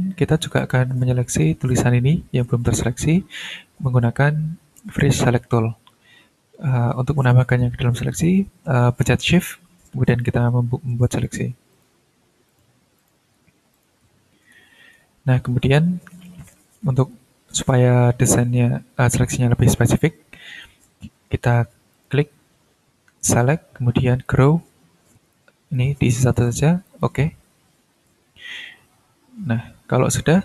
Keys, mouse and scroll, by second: 0.6 click, 1.0 click, 2.6 ctrl+scroll up 2, 10.1 shift+click, 11.1 shift+click, 11.7 shift+click, 12.5 shift+click, 13.0 shift+click, 13.7 shift+click, 14.6-15.5 ctrl+scroll down 2, 15.5 ctrl+scroll up 2, 18.0 ctrl+scroll up 2, 19.3-20.1 ctrl+scroll down 2, 20.7-21.4 scroll down 2, 21.9 click, 24.2 click, 25.3 click, 26.2 click, 26.8 click, 28.4-28.8 ctrl+scroll up 2, 29.2-29.7 ctrl+scroll down 2, 29.7-30.0 ctrl+scroll up 2, 30.3 ctrl+scroll down 2.